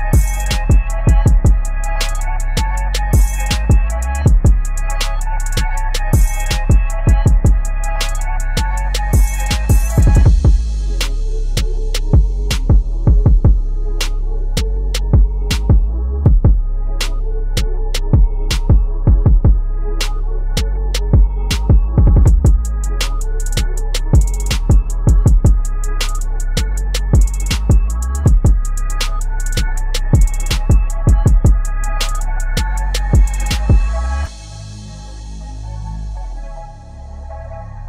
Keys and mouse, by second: 5.7-13.3 drag, 14.5-17.9 drag, 18.5 click, 22.5-27.5 drag, 27.8 click, 28.2-32.4 alt+shift+drag, 35.9-37.8 drag.